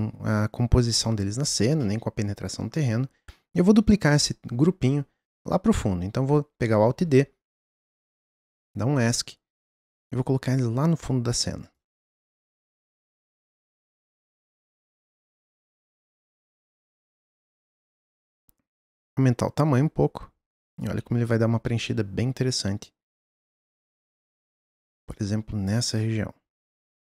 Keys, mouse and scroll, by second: 0.1-1.1 scroll up 1, 1.1-1.7 scroll up 1, 1.8-3.0 middle drag, 3.0-3.7 scroll down 1, 3.7-6.7 scroll down 1, 6.7-7.7 scroll down 1, 7.7 alt+d, 9.1 click, 12.7 click, 15.8-16.4 middle drag, 16.4-17.5 scroll up 1, 17.5 middle click, 18.3 s, 25.1 click.